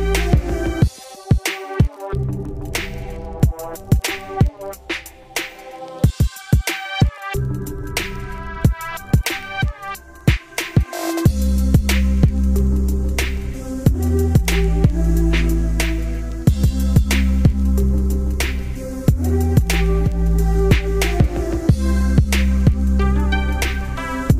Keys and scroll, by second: 0.4 ctrl+space, 2.6 ctrl+g, 6.8 ctrl+space, 7.1 ctrl+q, 7.7 ctrl+shift+space, 7.8 ctrl+shift+q, 8.6 ctrl+space, 9.0 ctrl+u, 9.3 ctrl+space, 9.8 ctrl+shift+q.